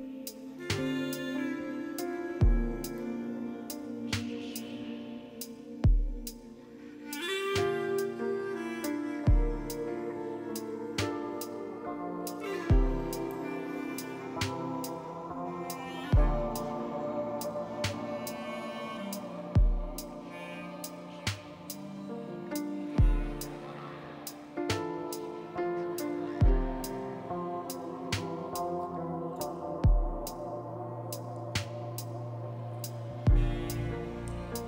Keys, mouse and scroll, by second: 27.7 typing.